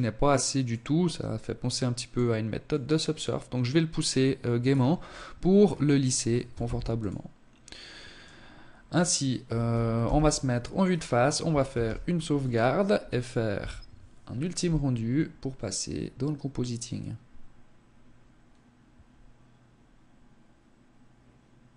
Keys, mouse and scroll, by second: 1.6 click, 3.6-4.1 scroll down 6, 4.6 scroll down 1, 4.8 scroll up 2, 5.6 ctrl+s, 7.8 scroll down 1, 8.9 KP_0, 9.8-10.4 scroll down 1, 10.7 ctrl+s.